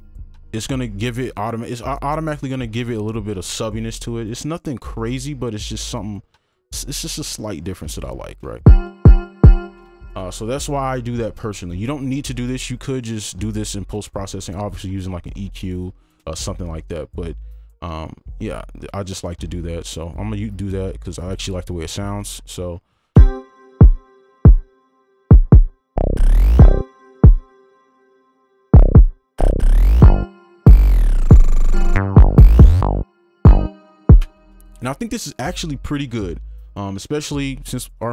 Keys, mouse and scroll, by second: 5.7 shift+click, 6.8-8.6 alt+scroll down 1, 8.8-10.6 typing, 10.8-11.5 alt+scroll down 1, 11.5-13.7 alt+scroll down 1, 18.5 right click, 20.9 double click, 23.1 space, 26.0 double click, 34.2 space, 37.9 double click.